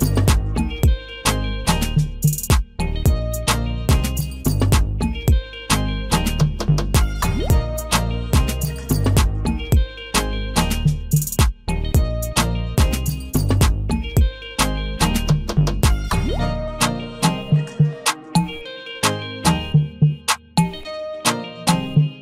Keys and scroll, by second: 5.1 ctrl+i, 17.6 ctrl+a.